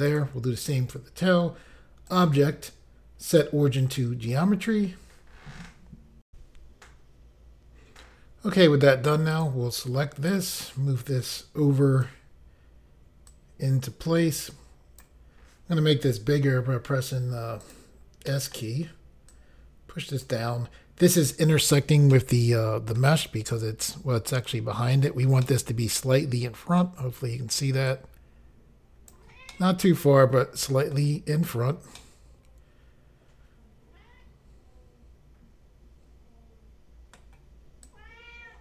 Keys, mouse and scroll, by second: 0.1 click, 0.2 click, 2.1 click, 2.3 click, 3.8 click, 3.9 click, 6.3 Pause, 9.3 click, 9.4 click, 10.3 click, 13.3 click, 16.0 s, 17.6 click, 18.2 middle click, 19.3 click, 22.1 middle click, 23.9 click, 25.4 middle click, 27.9 click, 29.5 middle click, 32.0 middle click, 37.8 click.